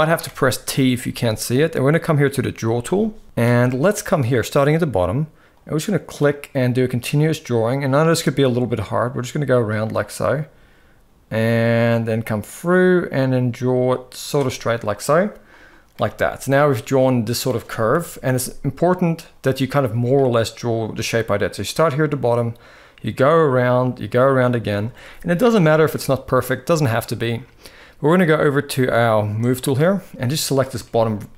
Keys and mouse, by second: 2.5 click, 5.3-14.0 drag, 16.2 middle click, 17.6 KP_1, 30.2 click, 30.5 shift+middle click.